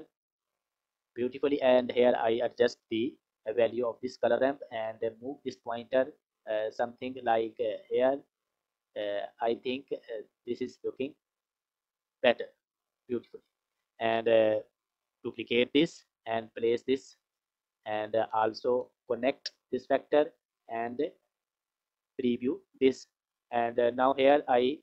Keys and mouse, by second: 1.3 click, 4.7-12.2 drag, 12.9 click, 13.6 click, 15.2 shift+d, 17.3 click, 18.6 click, 18.7-19.8 drag, 20.3 click, 22.1 ctrl+shift+click.